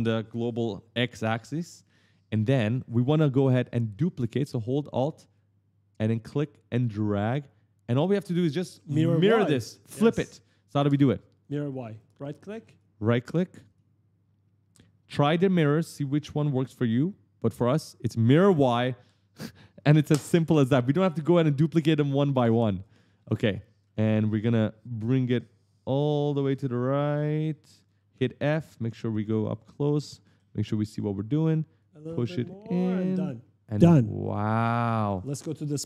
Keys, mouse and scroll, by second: 1.4-3.3 typing, 3.5 right click, 5.1 alt+click, 11.0-12.3 typing, 13.5 right click, 17.5 click, 22.1-24.6 typing, 22.6 right click, 25.6 click, 28.2-30.6 typing, 28.4 right click, 31.6 click, 34.3 right click.